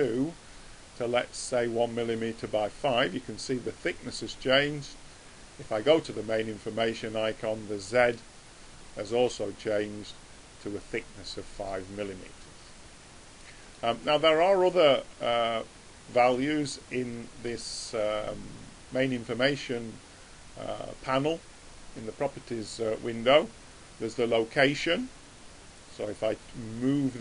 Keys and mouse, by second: 0.1 click, 4.1-5.7 middle drag, 5.7 click, 11.6-13.5 middle drag, 16.4 click, 26.5 click.